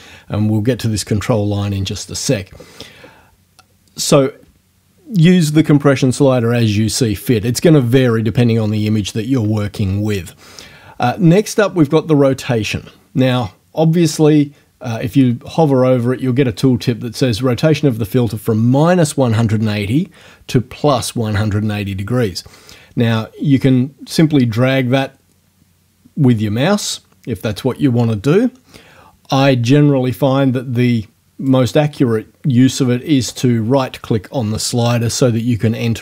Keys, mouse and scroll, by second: 24.2-31.7 drag, 33.3 right click.